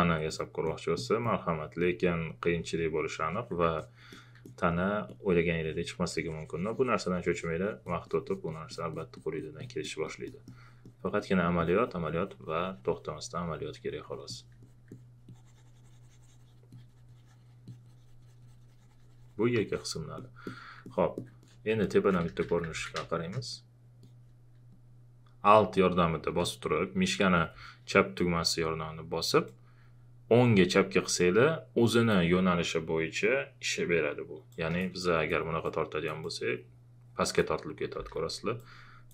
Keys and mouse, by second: 2.5 alt+click, 3.8 alt+click, 4.4 alt+click, 5.6 alt+click, 22.0-23.2 typing, 29.5-37.9 alt+drag, 37.9 ctrl+z, 38.6-39.1 drag.